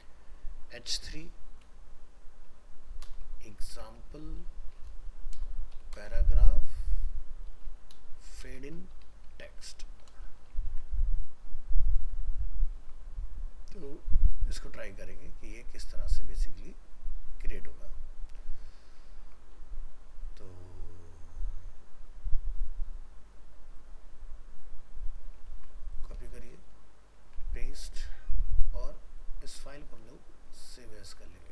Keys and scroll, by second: 10.7 ctrl+s, 19.2 ctrl+s, 25.5 ctrl+c, 26.5 ctrl+v, 30.0 alt+f, 30.1 alt+移.